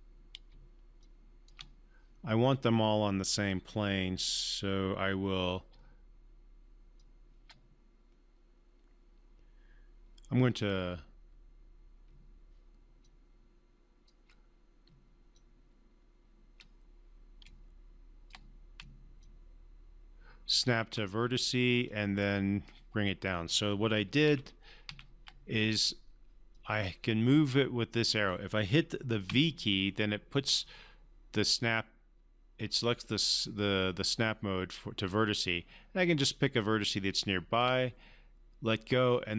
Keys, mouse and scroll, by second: 1.0-1.6 shift+drag, 5.7-7.6 typing, 7.0 click, 10.7 c, 12.5-21.1 typing, 13.0 click, 19.2 click, 21.8-22.8 drag, 24.2 z, 24.9 z, 26.5-28.4 drag, 29.3-32.2 typing, 33.8 typing, 35.4 click, 35.5-37.8 typing, 39.1-39.3 drag.